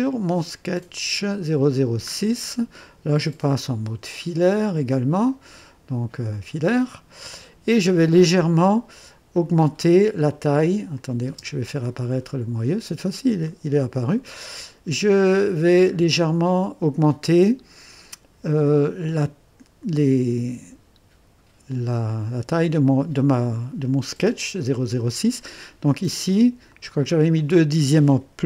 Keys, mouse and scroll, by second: 0.7 click, 2.1-2.4 scroll up 2, 2.5-3.3 right drag, 5.2 click, 6.3 click, 7.0-7.3 scroll up 1, 8.1 right click, 9.4 click, 10.9 click, 11.3 space, 12.6-13.0 scroll up 1, 13.5-14.2 right drag, 26.7 click.